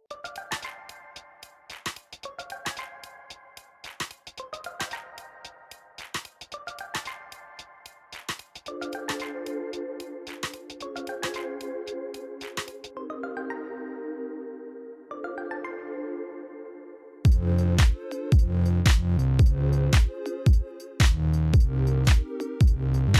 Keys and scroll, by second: 10.7 shift+d, 11.7 Escape, 13.9 g, 14.2 x.